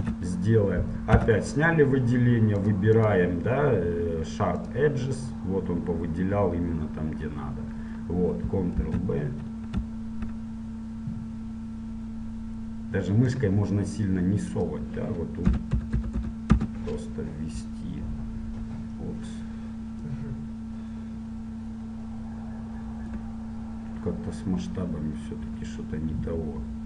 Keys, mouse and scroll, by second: 0.2 Tab, 1.3 a, 2.8 click, 4.8-6.7 drag, 6.7-9.5 middle drag, 9.0 ctrl+b, 16.7 KP_0, 21.0-22.1 drag.